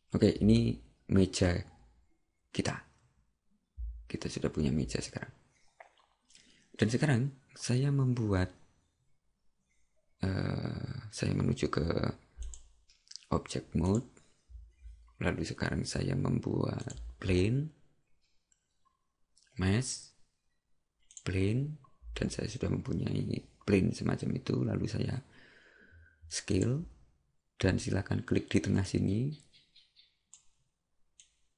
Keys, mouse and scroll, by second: 12.4 click, 26.6 click.